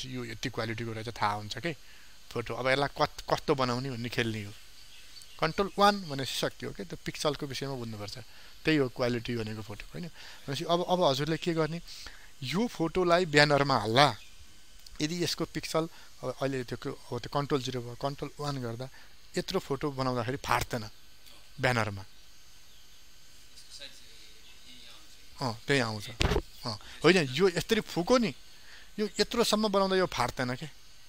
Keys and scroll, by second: 6.3 ctrl+1, 14.3 ctrl+d, 16.4 ctrl+0, 18.5 ctrl+1.